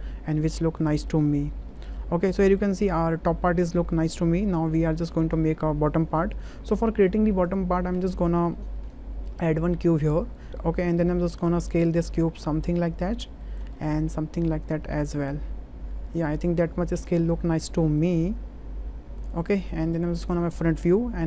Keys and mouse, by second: 1.7 shift+middle drag, 2.2 middle click, 4.9 shift+middle click, 6.4 middle click, 8.8 shift+a, 12.1-13.6 drag, 13.8-14.2 middle drag, 14.7-16.1 drag, 16.3-17.3 middle drag, 18.0-19.3 drag, 20.5 shift+drag.